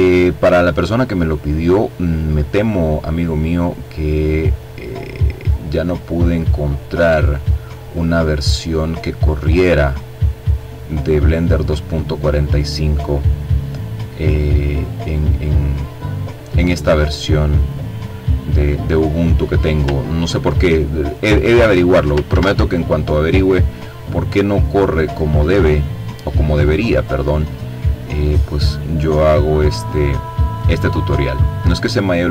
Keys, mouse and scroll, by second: 2.2-3.8 drag, 4.0-5.8 drag, 6.0-7.3 drag, 7.5-8.9 drag, 11.6-13.0 drag, 14.9 click, 17.9-18.3 ctrl+scroll up 2, 19.1-20.3 drag, 20.1 ctrl+z, 21.1 click, 22.1-23.5 drag, 23.7-25.4 drag, 25.7-28.9 drag, 31.6-32.3 drag.